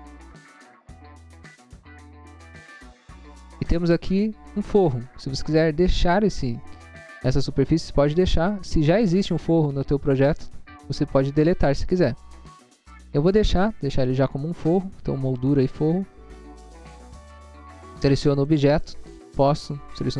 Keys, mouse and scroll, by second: 0.8 scroll down 1, 1.4 scroll down 1, 1.9 scroll down 1, 2.9 click, 7.1 click, 16.0 scroll down 1, 17.8 click, 18.4 click, 19.2 right click.